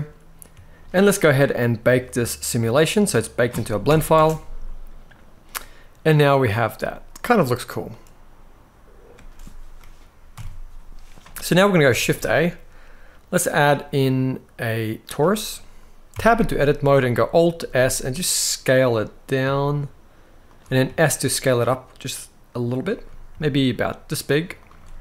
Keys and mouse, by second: 1.2 click, 3.6 shift+Left, 3.9 space, 5.2-5.9 middle drag, 7.0-7.5 middle drag, 8.8 space, 10.0 KP_1, 11.7 shift+a, 15.8 Tab, 16.1 middle click, 17.3 alt+s, 20.2 shift+click, 20.6 s, 22.4 click, 23.0 s, 24.3 click, 24.8 alt+s.